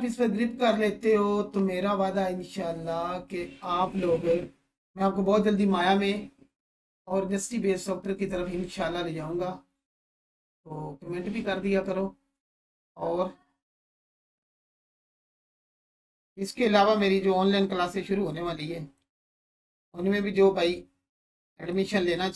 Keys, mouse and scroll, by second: 12.6 click, 13.9 space, 17.8-19.1 drag, 20.2-21.0 scroll down 1, 21.7-22.3 click.